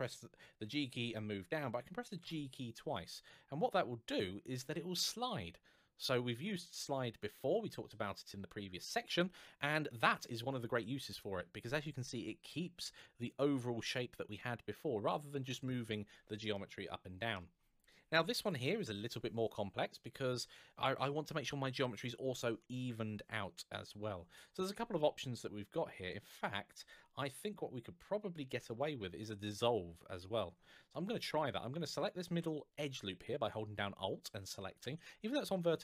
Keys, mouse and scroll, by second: 0.4 g, 9.4 click, 16.3 shift+middle click, 24.7-25.5 scroll down 1, 25.5-27.2 scroll up 1, 31.7 alt+click.